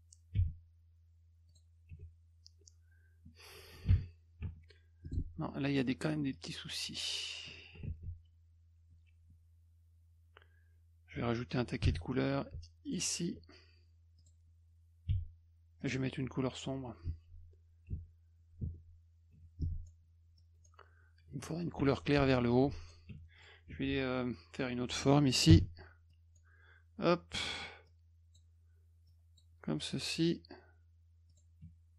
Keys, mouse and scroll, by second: 0.4 d, 1.5 click, 1.9 F1, 5.0 click, 6.3 click, 8.0 z, 11.8 g, 12.8 ctrl+alt+click, 14.2 click, 15.1 d, 15.8 click, 17.9 F1, 18.6 F2, 19.3 F1, 19.6 click, 20.4 click, 22.2 ctrl+z, 22.8 click, 23.4 click, 25.5 b, 26.1 click, 27.9 click, 29.1 click, 29.9 click, 31.3 click.